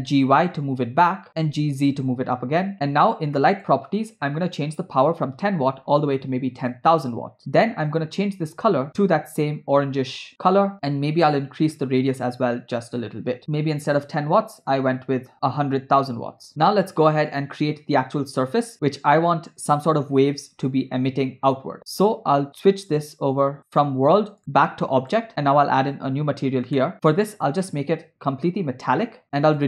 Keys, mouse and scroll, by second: 0.0 g, 1.5 g, 3.6 click, 4.5-6.7 drag, 5.8 0, 6.0 0, 7.9 click, 11.8-13.4 drag, 17.3 click, 18.7 scroll down 2, 22.9 click, 24.4 click, 25.8 drag, 26.8 middle click, 27.7-29.2 drag, 29.2 middle click, 29.5-29.6 drag.